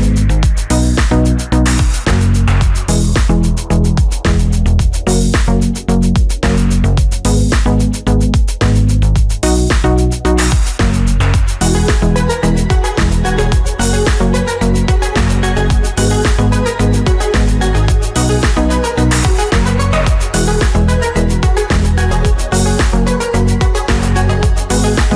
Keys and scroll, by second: 7.3 ctrl+-, 9.3 space, 16.5 ctrl+=, 19.6 ctrl+-, 22.6 ctrl+-, 23.5 ctrl+-.